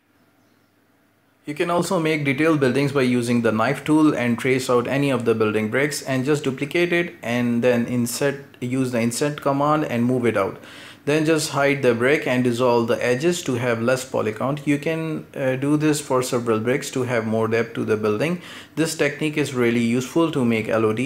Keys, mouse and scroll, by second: 4.7 scroll down 1, 4.9 shift+middle click, 5.3-5.6 scroll up 1, 5.6 right click, 5.9 shift+d, 6.5 o, 6.7 o, 6.8 i, 7.8 middle click, 8.0 g, 8.7-9.4 middle drag, 9.4-10.1 scroll up 1, 10.1 ctrl+KP_Add, 11.0 h, 11.3 right click, 11.5 x, 12.1 alt+h, 12.3-12.8 scroll down 4, 12.4 middle click, 12.6 Tab, 12.8 shift+middle click, 13.4-13.9 shift+middle drag, 13.9-14.2 scroll up 5, 14.2-14.9 right drag, 14.9 ctrl+KP_Add, 15.3 scroll down 3, 15.4 shift+d, 15.7-16.2 shift+middle drag, 16.2 g, 16.6 shift+middle click, 17.0 g, 17.3 g, 17.6 middle click, 17.9 Tab, 18.0 middle drag, 18.2 scroll down 4, 18.4-18.8 shift+middle drag, 18.8 scroll up 2, 18.9 Tab, 19.0 middle click, 19.4 shift+d, 19.8 middle click, 19.9-20.6 scroll up 2, 20.6 g, 20.8 scroll down 3, 20.9 shift+middle click.